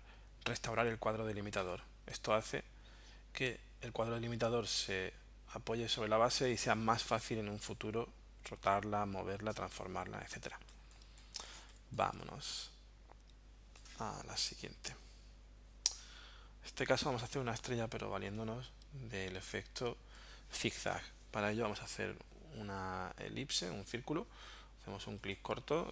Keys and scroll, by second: 10.6 space.